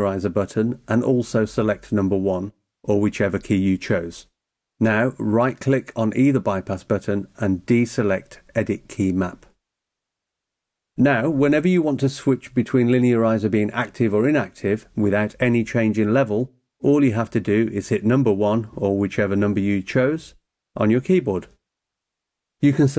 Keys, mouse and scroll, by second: 1.4 click, 2.7 1, 6.2 right click, 8.0 click, 15.3 1, 18.2 1, 22.1 click.